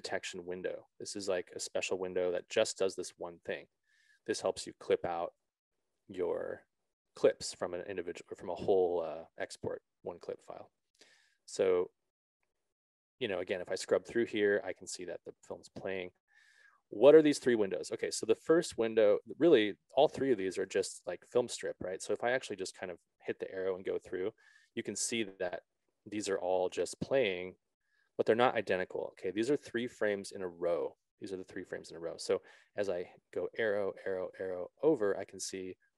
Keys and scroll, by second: 22.5 Right, 28.0 Left, 32.2 Right.